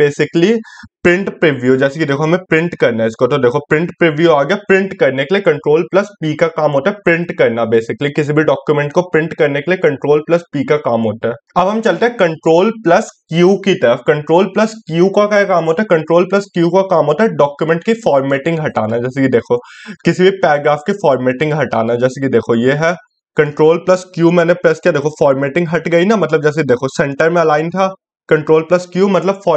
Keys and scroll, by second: 12.0 ctrl+q.